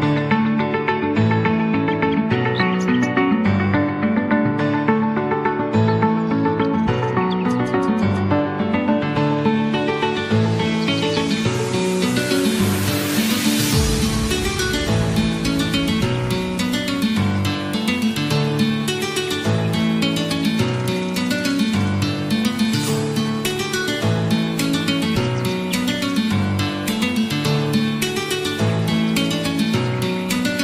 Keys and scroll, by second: 24.9 ctrl+z.